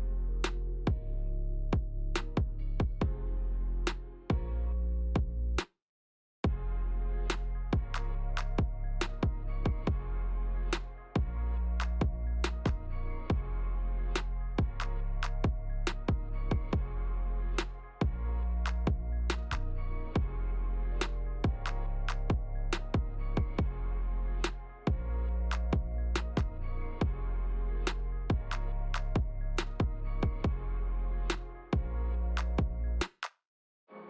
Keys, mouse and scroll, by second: 1.4 click, 1.9 space, 4.7 space, 6.3 click, 8.3 click, 11.8 ctrl+z, 13.2 click, 13.8 click, 17.6 space, 18.9-19.6 scroll down 4, 19.8 shift+middle click, 20.6-20.9 scroll up 3, 21.1 shift+middle click, 21.6-21.9 scroll up 2, 22.0 shift+middle click, 24.3 space, 25.4 click, 26.7 click, 27.3 middle click, 28.8 click, 31.8 F3.